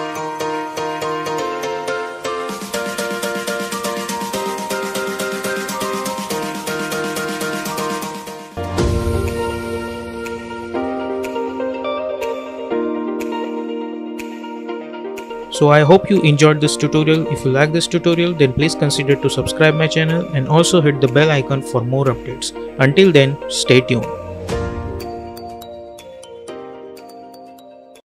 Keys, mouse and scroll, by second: 3.8 space, 4.1 click, 4.4 space.